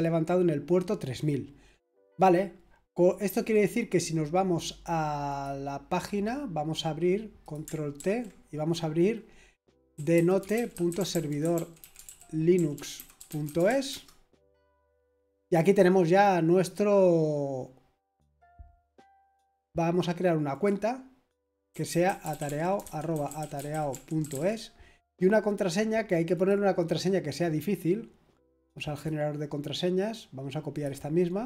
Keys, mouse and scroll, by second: 5.3 click, 5.7 click, 7.4 click, 8.0 ctrl+t, 9.7-14.1 typing, 20.5 click, 21.7-24.3 typing, 26.3 click, 28.9 click, 30.7 click.